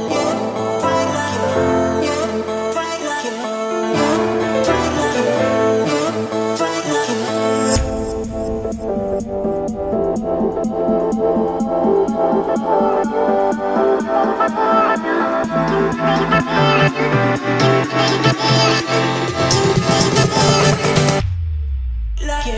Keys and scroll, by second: 1.0 Return, 3.7 4, 4.0 Return, 4.7 Escape, 22.0 Escape.